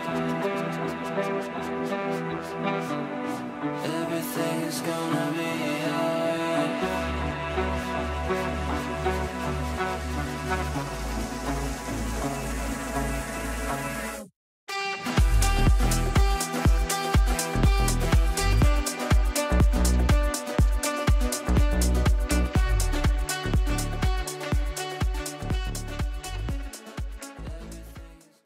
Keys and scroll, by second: 22.3 Delete, 25.2 shift+F2, 25.6 Escape, 27.0 F9.